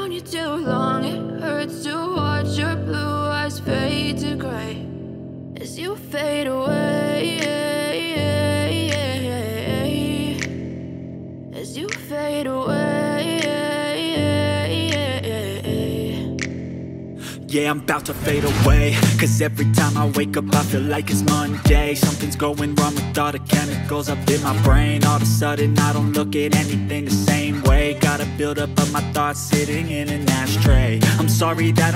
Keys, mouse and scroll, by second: 2.3 space, 2.3 ctrl+click, 3.3 alt+space, 3.4 ctrl+alt+click, 5.1 space, 5.2 alt+click, 8.3 alt+click, 12.2 double click, 16.7-19.8 typing, 22.7 shift+click, 24.0 shift+click, 26.0 double click, 26.8 alt+click, 28.4 double click, 29.5-31.9 typing.